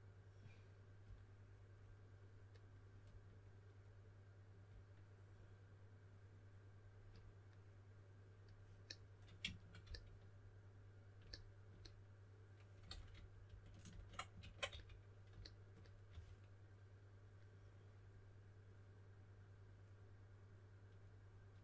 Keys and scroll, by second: 9.8 s, 12.8 super+z, 13.1 super+z, 13.4 super+z, 14.3 super+z, 14.6 s, 16.0 4.